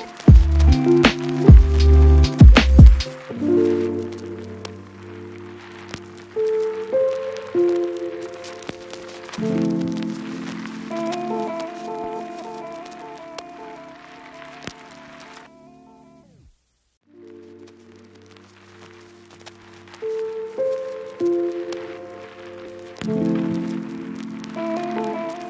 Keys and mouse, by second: 1.4 middle click, 1.9-3.2 drag, 3.6-5.1 drag, 11.6 shift+middle click, 12.2 ctrl+middle click, 12.4 ctrl+j, 12.6 ctrl+z, 13.8 click, 13.9 Tab, 14.1 Tab, 14.3 Tab, 14.5 Tab, 14.6 Tab, 14.7 ctrl+shift+click, 14.9 ctrl+j, 15.4 alt+v, 16.0 Tab, 16.0 a, 16.1 l, 16.3 shift+n, 16.5 Tab, 16.9 alt+n, 17.1 alt+v, 17.8 a, 18.0 click, 18.2 shift+middle click, 19.1 click, 19.3 middle click, 19.7 click, 20.8 click, 21.2 click, 21.6 shift+click, 22.3 click, 23.6 shift+click, 24.3 ctrl+click, 24.5 ctrl+a, 25.1 Tab, 25.4 Tab.